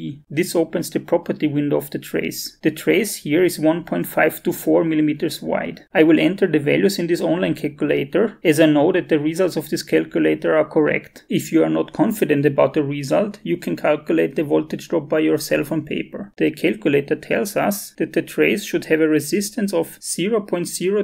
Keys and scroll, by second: 6.9 alt+Tab.